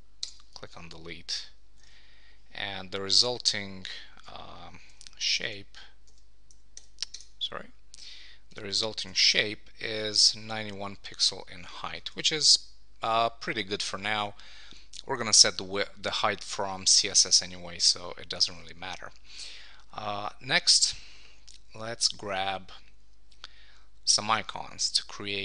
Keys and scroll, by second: 4.2 super+d, 4.9 Tab, 5.5 super+t, 6.8 Escape, 7.1 Tab, 9.0 super+t, 11.7 Escape, 18.5 super+s.